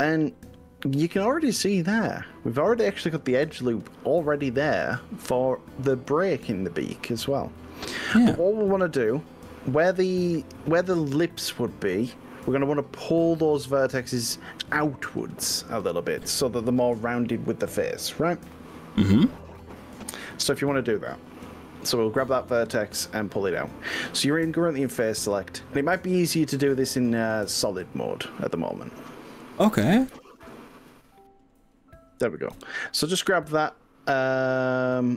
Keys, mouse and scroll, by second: 2.5-6.5 middle drag, 6.5-9.7 drag, 11.4 click, 12.3-14.2 middle drag, 14.2 click, 14.5 middle click, 15.0 click, 15.0 middle click, 16.5-21.7 middle drag, 21.7 click, 22.0 middle click, 22.1 click, 22.3-23.5 middle drag, 24.5 click, 32.7 KP_3.